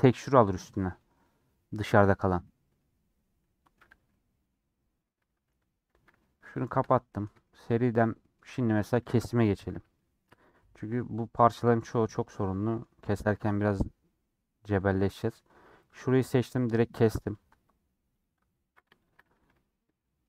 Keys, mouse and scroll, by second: 3.4 middle click, 3.9 Tab, 4.0-5.7 middle drag, 5.7 h, 6.1-8.8 middle drag, 8.8 click, 9.6 /, 9.9 middle click, 10.3 Tab, 10.4-13.2 middle drag, 13.2 scroll down 1, 13.3 3, 13.4-15.6 drag, 16.3-17.5 scroll up 3, 18.1-19.9 drag, 19.9-20.2 middle drag.